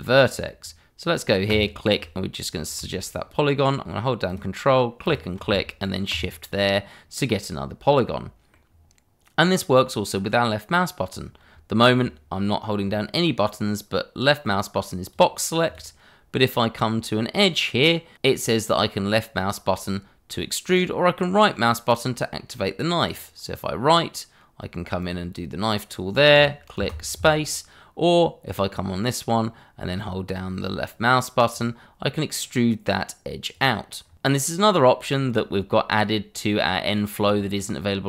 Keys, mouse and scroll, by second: 1.4 shift+click, 2.1 click, 4.2 ctrl+click, 5.1 click, 6.1 click, 7.3 middle click, 14.4 click, 23.0 right click, 25.0 click, 31.5 click, 34.0 scroll up 1, 34.5 shift+middle click, 34.8-35.5 scroll up 1, 35.5 middle click, 36.2 shift+middle click, 36.3 middle click, 36.3 shift+middle click.